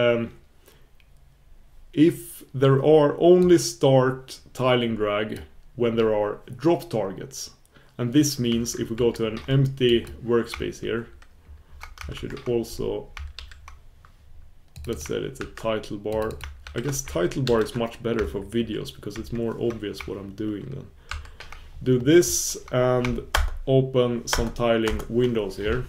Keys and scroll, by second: 12.2 super+1.